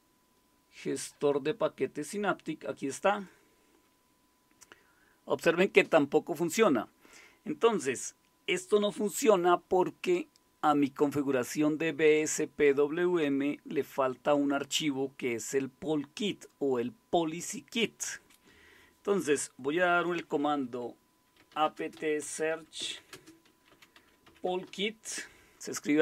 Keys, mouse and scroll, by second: 21.1-25.2 typing.